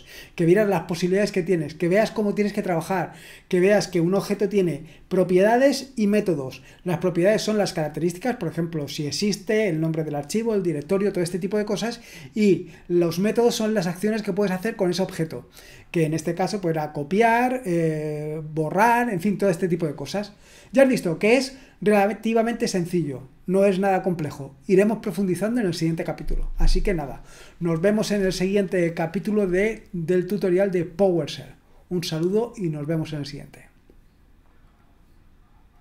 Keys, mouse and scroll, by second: 35.7 click.